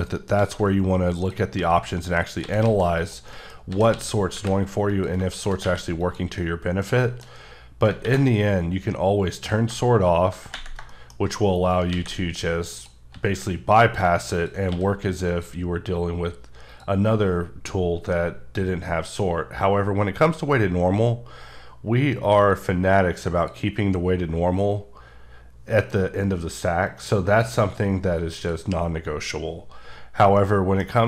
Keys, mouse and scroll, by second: 0.1 shift+right click, 0.4 shift+a, 1.2 click, 1.6 s, 2.3 click, 2.4 s, 2.7 z, 3.0 click, 3.3 middle click, 3.7 s, 3.9 x, 4.3 y, 4.9 click, 5.6 q, 6.0 click, 6.4 middle click, 9.4 click, 10.9 middle click, 11.7 shift+right click, 11.9 shift+a, 12.8 click, 13.1 s, 13.8 click, 14.7 q, 15.3 click, 16.7 click, 22.5 click, 22.8 click, 26.9 click, 30.4 middle click, 30.9 scroll up 1.